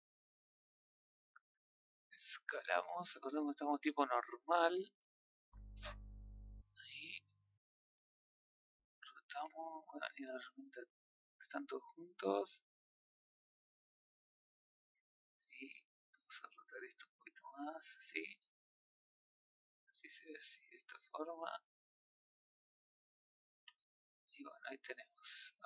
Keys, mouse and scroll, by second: 2.2 click, 4.8-6.1 drag, 10.2-11.4 drag, 12.6-14.9 middle drag, 14.9 click, 16.4 click, 21.7-23.2 middle drag, 23.2 scroll down 1, 23.4 a, 23.9-24.3 middle drag, 24.3-24.8 scroll down 2, 24.8-25.6 middle drag.